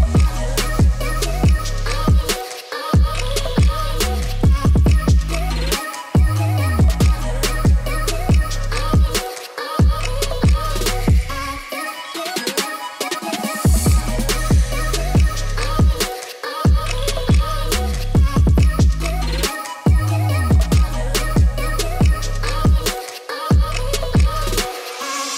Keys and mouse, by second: 1.2 g, 1.3 y, 1.8 x, 3.6 middle drag, 5.2 middle drag, 5.9 Tab, 6.8 a, 10.1 click, 15.8-20.0 shift+drag, 20.0 Tab, 20.5-20.9 middle drag, 21.7 click, 23.1-25.3 drag.